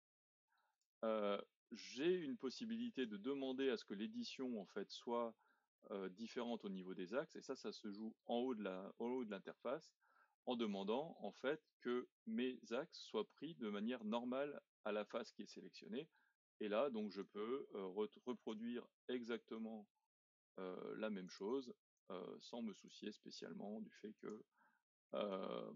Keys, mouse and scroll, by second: 0.7 click, 1.2-4.3 middle drag, 9.1-12.3 drag, 15.8-17.2 middle drag, 17.2 click, 18.6 z, 21.9 click, 23.0 e, 25.3 click.